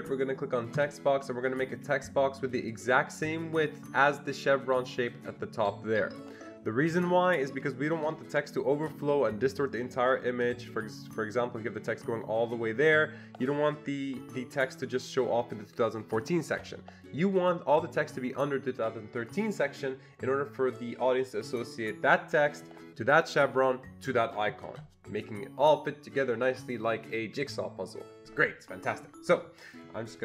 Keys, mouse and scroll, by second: 0.8 click, 2.8 click, 10.4-20.0 drag.